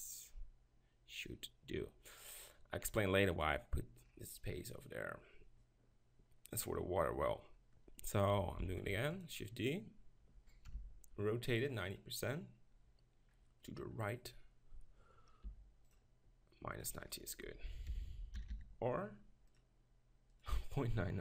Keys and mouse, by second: 2.7-5.5 middle drag, 8.6 shift+d, 10.7 n, 15.4 r, 16.0-18.6 drag, 20.3-21.2 drag.